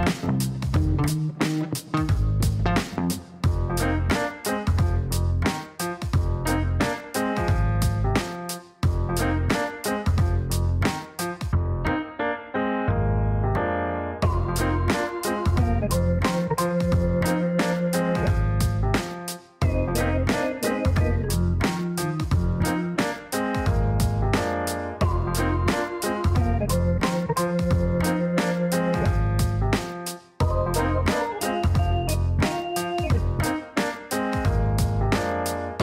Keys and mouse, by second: 3.0 click, 5.2 click, 6.8 click, 7.6 click, 8.5-10.9 typing, 11.0 Up, 11.7 Return, 12.3 Return, 13.7 click, 14.8 click, 16.8 click, 17.9 click, 19.1 click, 24.4 click, 28.7 click, 29.2 middle click, 30.5 click, 34.6 click, 35.3 click.